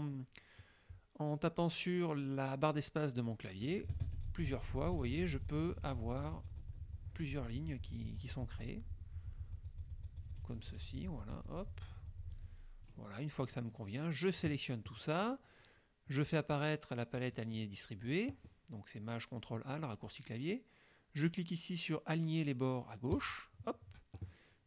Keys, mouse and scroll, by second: 3.9 space, 13.5-14.7 drag, 17.4 click, 23.3 click.